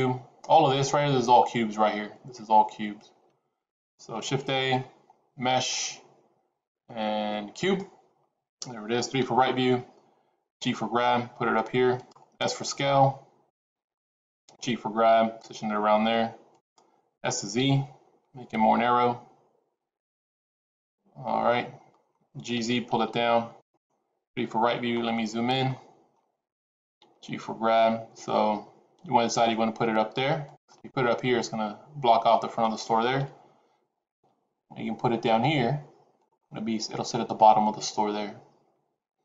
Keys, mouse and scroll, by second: 4.1 shift+a, 9.1 KP_3, 10.4 g, 12.3 s, 13.8 g, 17.1 s, 20.4 middle click, 22.3 g, 24.2 KP_3, 24.8-25.5 scroll up 5, 25.5 shift+middle click, 26.9 g, 30.6 middle click, 33.1 KP_3, 34.0 g, 36.3 middle click.